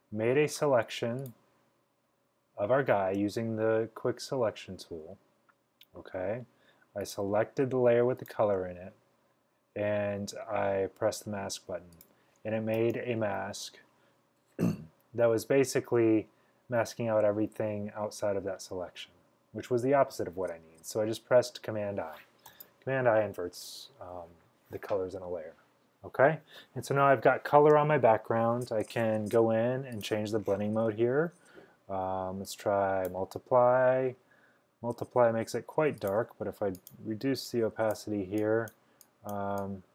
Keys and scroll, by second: 12.8 super+i, 22.5 super+i.